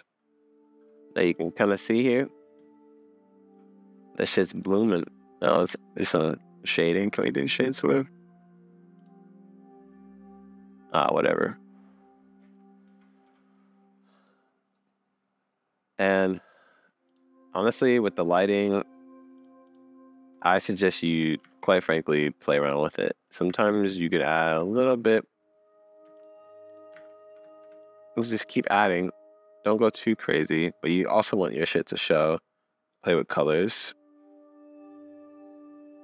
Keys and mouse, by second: 4.5 click, 5.1 click, 6.6 click, 9.0 click, 12.8 n, 13.3 n, 16.1 click, 17.5-19.4 middle drag, 19.7-20.8 middle drag, 21.8 super+s, 22.9 click, 23.5 shift+d, 26.0 x, 27.0 alt+d, 28.6 r, 30.0 click, 32.1 click.